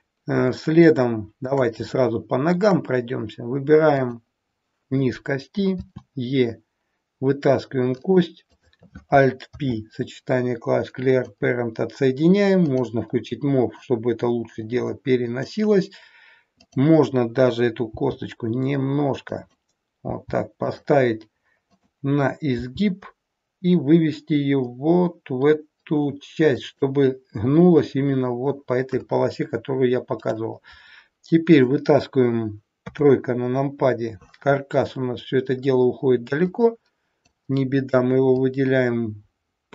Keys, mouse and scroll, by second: 0.5 shift+middle click, 3.9 click, 5.8 e, 8.4 click, 9.5 alt+p, 12.7 click, 13.8 click, 17.9 g, 20.0 g, 21.8 click, 22.7 g, 30.2 click, 32.8 KP_3, 34.4-35.2 scroll down 3, 35.2 scroll down 1, 36.4 click, 38.4 click.